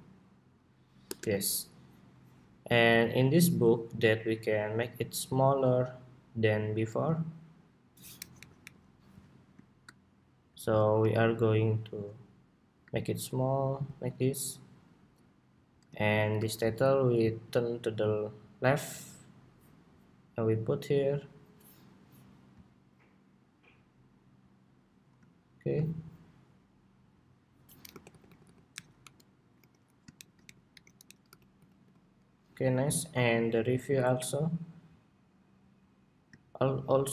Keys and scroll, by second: 8.1 alt+Up.